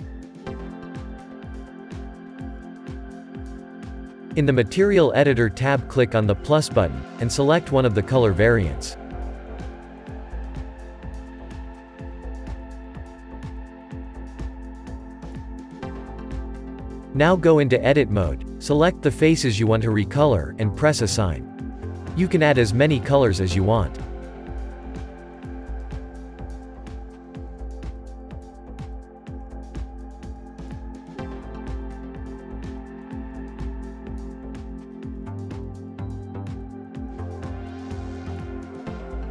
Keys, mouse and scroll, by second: 0.0-0.7 scroll up 2, 0.7 click, 6.8-11.8 drag, 13.0-14.9 shift+middle drag, 14.9 scroll up 2, 15.6 Tab, 16.1-16.7 scroll up 2, 16.7-18.8 middle drag, 18.8 click, 18.9 click, 21.0 ctrl+KP_Add, 22.2 middle click, 22.6-23.3 scroll down 5, 23.3-24.8 shift+middle drag, 24.8 scroll up 3, 25.0-26.2 middle drag, 26.2-26.6 scroll up 1, 26.6-29.0 middle drag, 29.0 click, 29.7-31.5 drag, 31.5-32.4 scroll up 2, 32.4-33.8 middle drag, 33.9 click, 35.9-37.3 drag, 38.1-39.3 drag.